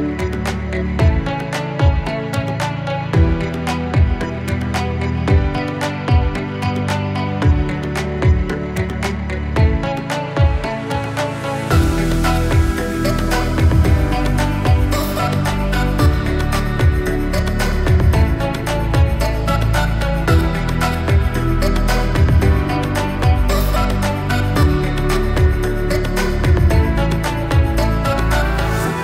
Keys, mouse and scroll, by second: 7.5 scroll down 1, 8.6-11.8 drag, 11.8-13.3 scroll up 1, 13.3-29.0 drag.